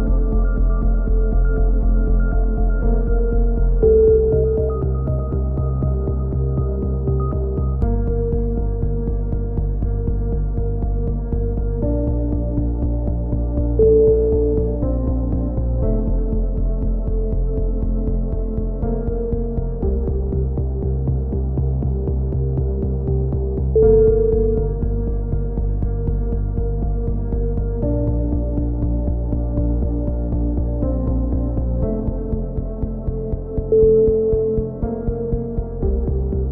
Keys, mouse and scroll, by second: 0.2 click, 0.9 middle click, 1.2 right click, 1.5 e, 1.7 middle click, 2.3 right click, 3.1-4.2 drag, 4.2 middle click, 4.5 right click, 4.8 f, 5.8 f, 6.0 a, 6.3 Tab, 6.6 z, 18.2 KP_7, 18.7 z, 18.9-20.8 drag, 19.6 z, 21.2-22.2 drag, 28.7-30.6 drag, 29.2 Tab, 31.7 middle click, 32.0-33.6 drag, 34.6-35.6 middle drag, 35.6-36.5 right drag.